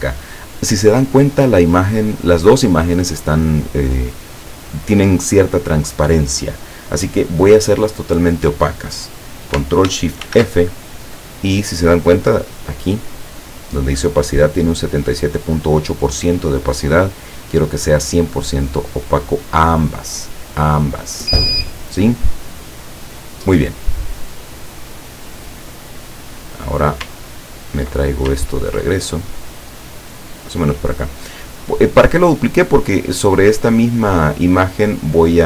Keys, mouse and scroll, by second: 10.4 ctrl+shift+f, 13.2 click, 16.7-17.6 drag, 18.8 click, 20.0-20.5 drag, 21.5 click, 22.5-24.0 drag, 24.3-25.0 drag, 26.3-27.1 drag, 27.6 ctrl+scroll down 2, 28.6 ctrl+scroll down 2, 29.2-30.8 ctrl+drag, 30.9-35.4 drag.